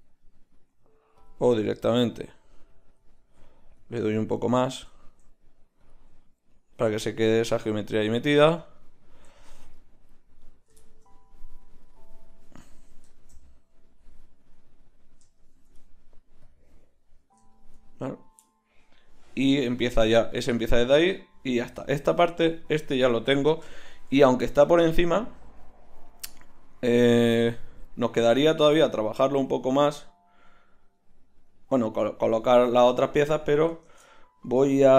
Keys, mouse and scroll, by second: 3.4 ctrl+z, 8.5 Tab, 11.8 middle click, 14.1 click, 16.4-20.7 middle drag, 28.7 z, 29.5-32.4 middle drag, 32.4 Tab, 33.9 shift+Tab.